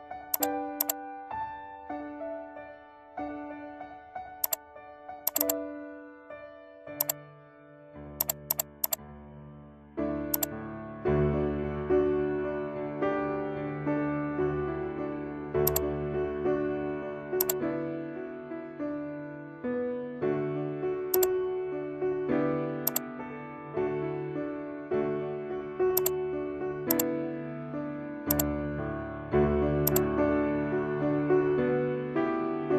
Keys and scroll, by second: 2.1 ctrl+0.